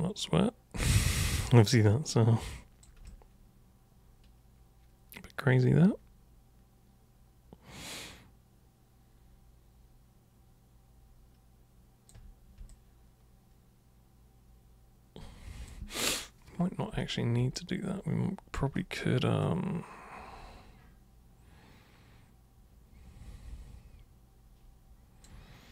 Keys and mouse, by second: 1.2 super+click, 1.9 super+click, 3.1-12.1 alt+super+drag, 12.7-15.7 alt+super+drag, 17.6-18.6 alt+super+drag, 19.4-25.3 alt+super+drag.